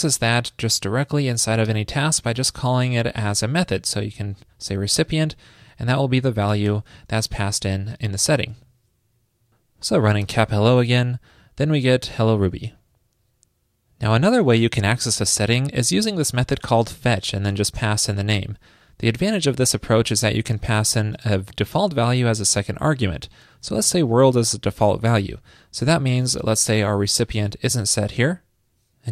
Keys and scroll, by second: 0.7 alt+shift+Left, 6.4 alt+shift+Left, 8.8 super+s, 17.8 alt+Right, 26.7 super+/, 26.8 super+s.